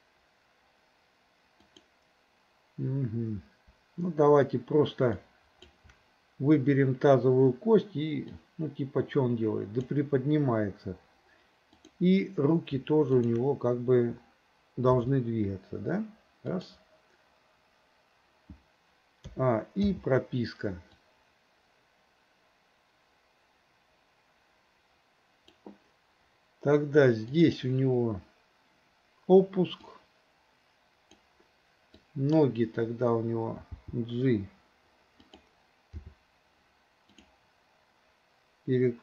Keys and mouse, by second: 1.7 click, 5.3 shift+click, 8.5-10.0 drag, 11.9 click, 13.2 shift+click, 15.0 g, 19.4 a, 19.9 i, 21.1-25.7 drag, 30.1-31.3 drag, 32.1 click, 33.8 g, 36.0 r.